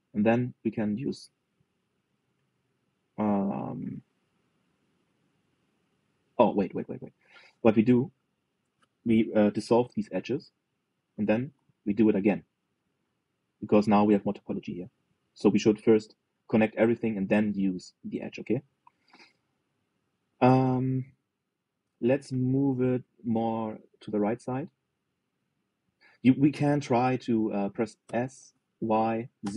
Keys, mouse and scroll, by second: 0.1 scroll up 1, 0.3 middle click, 1.1 click, 2.6 middle click, 3.0 scroll up 2, 3.3-7.8 middle drag, 8.8 alt+shift+click, 10.0 Delete, 12.1 ctrl+r, 19.2-21.7 middle drag, 22.8 g, 28.7 s.